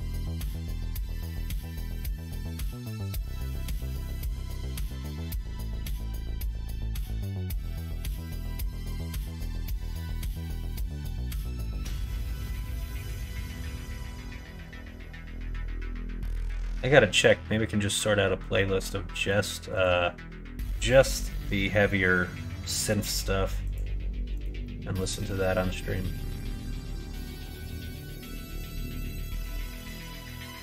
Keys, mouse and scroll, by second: 0.1 q, 1.8 middle click, 2.6 q, 3.5 middle click, 4.6 middle click, 4.9 middle click, 6.4 click, 7.0 middle click, 7.6 shift+middle click, 8.1 middle click, 8.7 shift+middle click, 9.4 middle click, 11.1 shift+click, 11.7 middle click, 12.4 shift+middle click, 13.2 q, 14.2 click, 14.5 Tab, 14.9 click, 15.2 middle click, 16.3 middle click, 16.8 shift+middle click, 17.9 middle click, 19.0 middle click, 19.6 click, 22.8 click, 24.3 click, 24.5 middle click, 27.5 click, 28.0 Tab, 28.5 alt+z, 29.2 2.